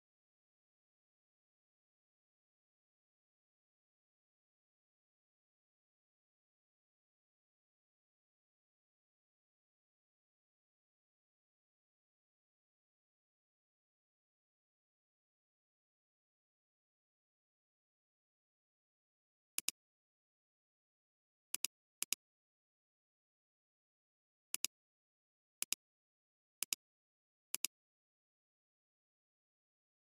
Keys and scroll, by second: 19.5 alt+space, 21.9 space, 22.7 alt+space.